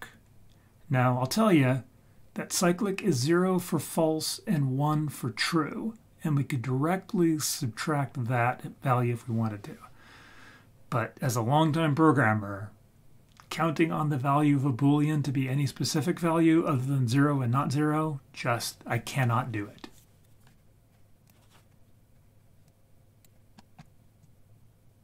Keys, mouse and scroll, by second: 22.6 click, 23.4-23.7 scroll down 2, 23.6 middle click, 24.2-25.0 drag.